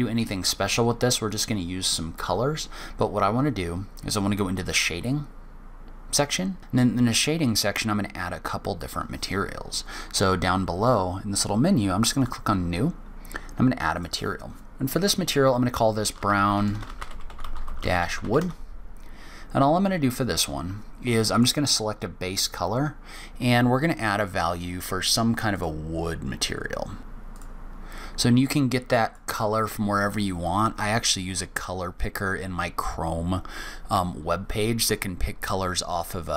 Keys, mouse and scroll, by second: 4.6 click, 6.6 click, 11.9 click, 13.7 click, 16.6 BackSpace, 17.9 o, 21.1 click, 27.1 click.